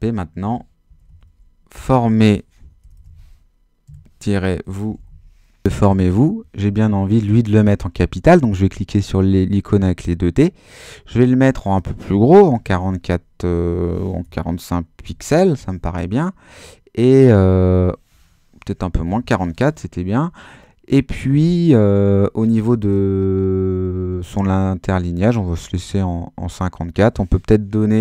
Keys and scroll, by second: 0.1-5.5 typing, 12.4 4, 14.2 BackSpace, 15.0 5, 18.9 BackSpace, 19.0 4.